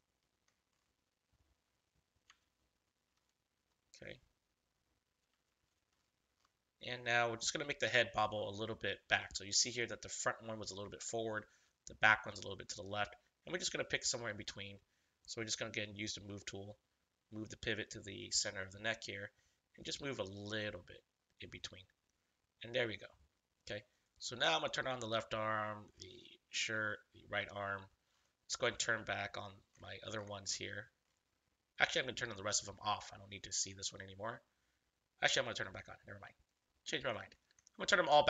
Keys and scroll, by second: 2.3 ctrl+-, 5.4 ctrl+=.